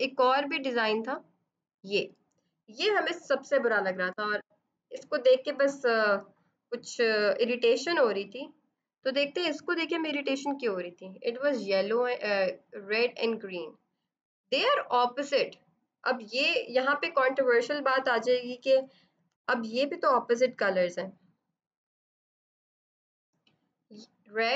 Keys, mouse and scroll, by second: 0.4 click, 9.7 click, 12.3 click, 16.1 b, 19.2 F7, 20.0 click.